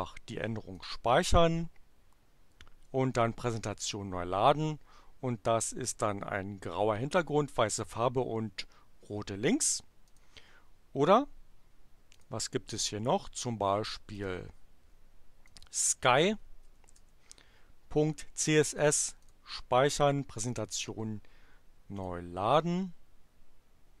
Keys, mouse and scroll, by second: 0.9 click, 3.1 click, 10.1 click, 12.1 click, 14.2 click, 15.4-16.4 drag, 16.4-17.5 typing, 19.1 click, 20.5 click, 21.9 click.